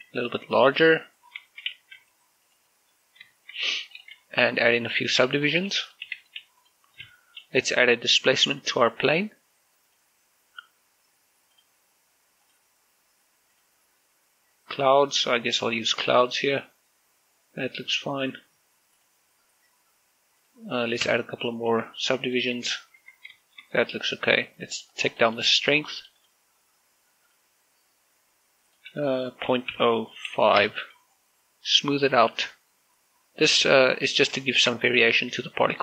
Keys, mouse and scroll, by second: 0.6 right click, 0.8 s, 1.8 right click, 2.0 scroll down 1, 2.2 shift+middle click, 2.5 z, 3.2 click, 3.6 scroll up 1, 4.1 shift+middle click, 4.5 s, 4.7 click, 4.9 Tab, 5.7 w, 6.2 click, 6.5 w, 6.6 click, 6.8 w, 7.0 click, 7.2 w, 7.4 click, 7.8 Tab, 8.8 click, 17.2 click, 19.8 click, 21.8 Tab, 22.5 w, 23.1 click, 23.4 w, 23.5 click, 23.8 Tab, 24.2 shift+middle click, 25.4 click, 30.0 click, 30.5 typing, 31.4 Return, 33.0 scroll up 1, 33.3-35.0 middle drag, 35.1 scroll down 1, 35.2 shift+middle click.